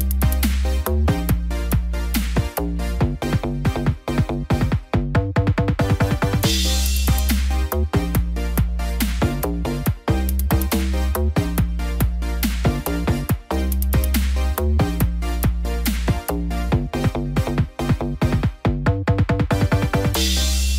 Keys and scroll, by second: 1.5 ctrl+d.